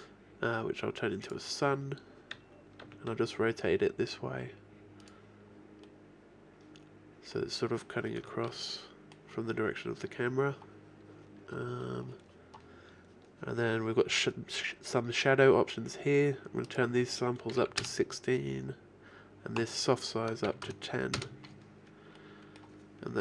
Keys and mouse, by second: 2.9 r, 5.9-7.6 drag, 8.3-10.9 middle drag, 11.8-13.5 middle drag, 22.3 middle click.